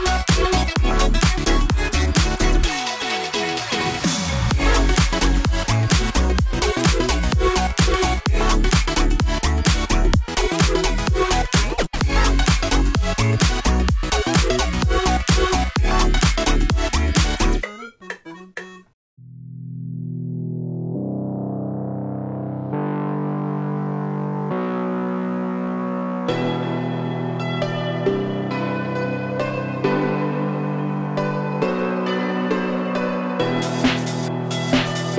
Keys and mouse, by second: 0.6 shift+middle click, 1.1 z, 1.6 click, 2.1 Tab, 2.8 w, 3.4 shift+middle click, 3.5 shift+click, 3.9-5.3 drag, 5.5 click, 7.2 click, 8.5 z, 9.4 click, 9.9 Tab, 10.3 click, 11.3 3, 12.1 alt+shift+1, 12.2 alt+shift+click, 13.9 alt+shift+click, 15.1 3, 15.4 shift+click, 16.0 shift+click, 16.6 shift+click, 17.2 shift+click, 17.5 shift+click, 17.9 click, 20.1 shift+middle click, 20.8 shift+click, 20.9 shift+middle click, 21.7 shift+click, 22.1 shift+click, 23.6 click, 24.3 shift+click, 24.5 shift+click, 26.4 click, 26.9 click, 29.5 `, 31.0 Tab, 31.4 middle click, 31.9-33.6 middle drag, 34.3-35.1 drag.